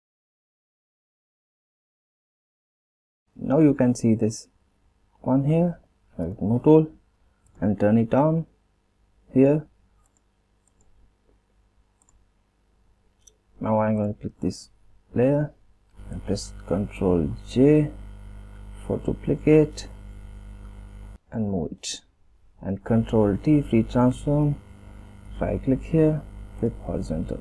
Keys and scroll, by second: 15.5 ctrl+j, 23.4 ctrl+t.